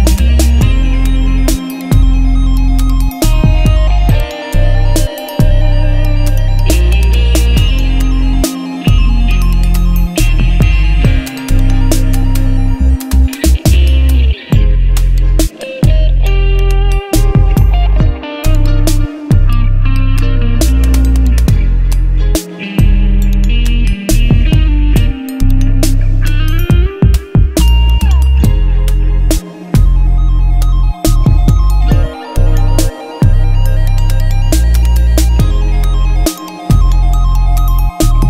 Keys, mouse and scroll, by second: 2.5 click, 5.5 click, 8.8-9.9 scroll down 1, 9.9 click, 17.7 click, 21.7 click, 25.2 click, 29.2 click, 29.3 click, 33.1-37.7 drag.